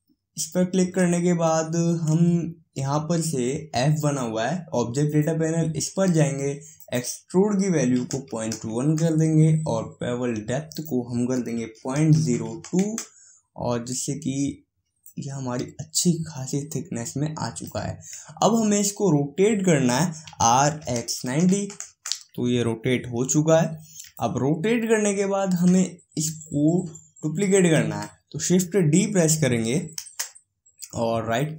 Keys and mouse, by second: 5.3-8.9 drag, 11.0-12.8 drag, 23.2-30.2 middle drag, 30.2 shift+d.